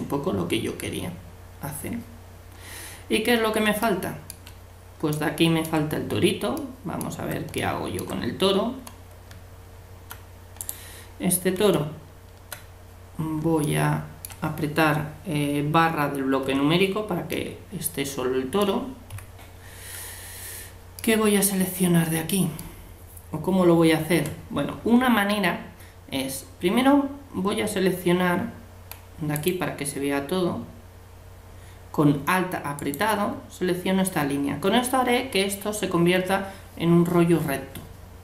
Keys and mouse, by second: 9.3 Tab, 11.7 Tab, 24.2-25.6 middle drag, 29.3-31.2 drag, 32.8-34.6 right drag.